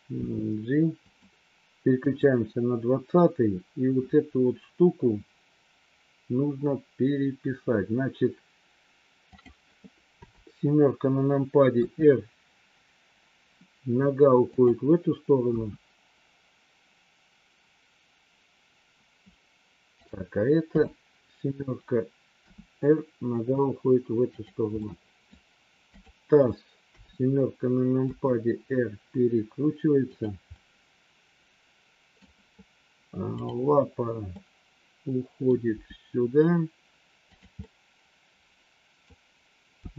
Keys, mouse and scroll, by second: 0.2 g, 2.0 click, 10.2 KP_7, 11.7 r, 15.4 KP_1, 19.9 click, 20.7 KP_7, 22.3 r, 24.8 middle click, 25.9 click, 26.8 KP_7, 27.9 r, 30.5-32.2 middle drag, 33.3 click, 34.3-35.5 middle drag, 35.7 g, 37.5 scroll up 1, 37.7-39.0 middle drag, 39.8 g.